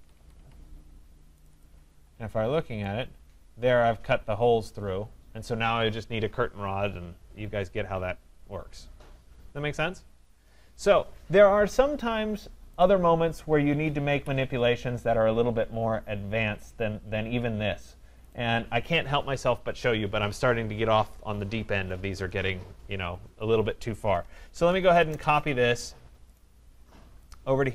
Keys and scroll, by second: 14.1 Delete, 25.0 Return, 27.6 Escape.